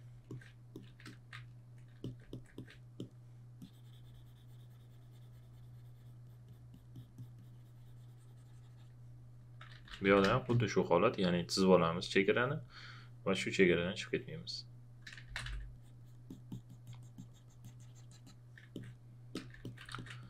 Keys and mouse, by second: 0.2 alt+click, 1.0 alt+shift+click, 6.2 click, 9.5-10.5 typing, 13.9 click, 14.9-15.9 typing, 15.7 click, 19.9 ctrl+a, 19.9 ctrl+click.